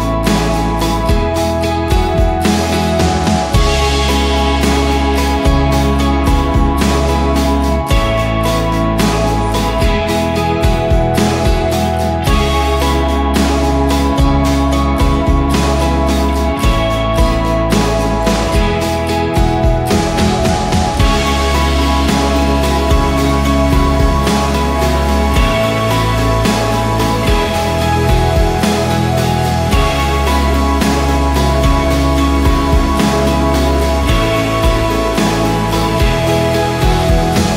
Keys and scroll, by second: 0.4 Return, 5.4-8.9 typing, 9.6 ctrl+t, 10.9 ctrl+a, 11.2-12.0 typing, 12.3 ctrl+a, 13.3 ctrl+d, 16.9-21.1 typing, 22.6 ctrl+s, 22.8 ctrl+w, 23.2 Return, 26.3 Return, 27.9 ctrl+t, 28.9-29.8 typing, 30.0 Return, 30.1 Return, 31.6 ctrl+d, 32.6 shift+Right, 34.3 shift+Right, 34.3 ctrl+a, 36.1 ctrl+d, 36.3 ctrl+d, 36.5 shift+Right.